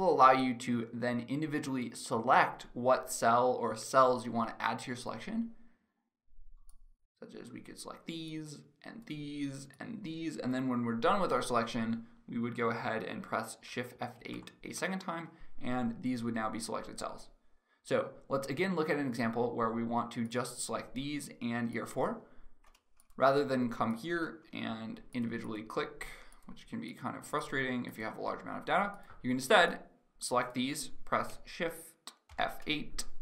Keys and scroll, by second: 14.0 shift+F8, 31.9 shift+F8.